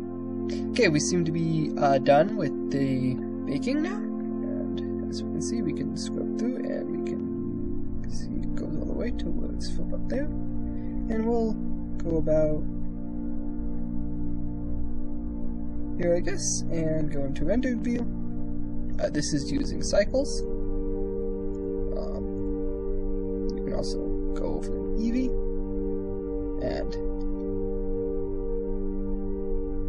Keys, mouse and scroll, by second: 4.6-10.8 drag, 12.3 click, 13.2-15.8 drag, 16.5 z, 20.1 click, 21.4-23.3 drag.